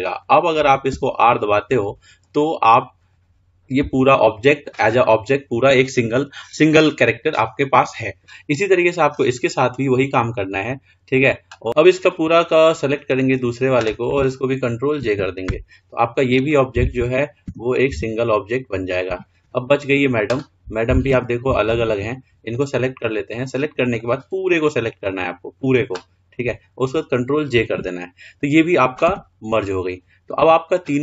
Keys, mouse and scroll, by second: 0.1 click, 1.2 r, 9.0-9.8 scroll up 1, 9.9 click, 11.4-12.1 drag, 15.5 ctrl+j, 16.7 click, 17.8 r, 20.2 drag, 21.4 r, 22.8 click, 24.3 click, 28.0 ctrl+j, 29.3 r.